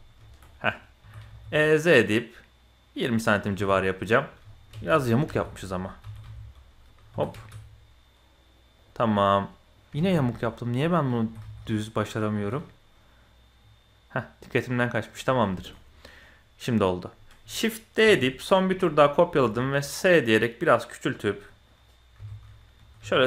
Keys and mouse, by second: 0.3 shift+click, 0.4 click, 1.0 e, 3.2 middle click, 3.5 Tab, 3.7 middle click, 4.5 middle click, 4.8 ctrl+z, 5.3 ctrl+z, 6.0 g, 7.1 e, 9.0 middle click, 9.4 click, 10.0 ctrl+z, 10.3 click, 11.1 g, 12.3 e, 15.5 shift+click, 15.7-17.1 drag, 18.0 shift+d, 18.7-19.0 drag, 19.3 s, 21.3-21.6 drag, 22.2 KP_7, 23.0 g.